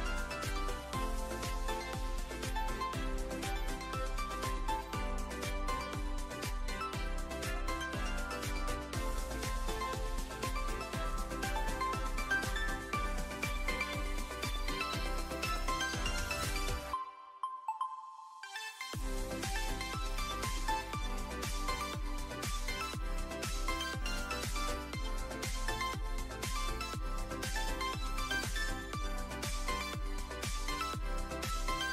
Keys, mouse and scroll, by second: 0.9 click, 1.5 shift+middle drag, 2.3-3.2 drag, 3.6-7.5 drag, 7.0 KP_0, 8.9 click, 11.6-13.9 drag, 14.5-15.2 alt+middle drag, 15.4 `, 16.5 `, 18.0 shift+d, 18.2 x, 19.0 click, 19.3 shift+middle click, 20.7 click, 22.8 click, 23.5-26.0 drag, 25.5 KP_0, 27.1 middle drag, 29.8-31.3 drag.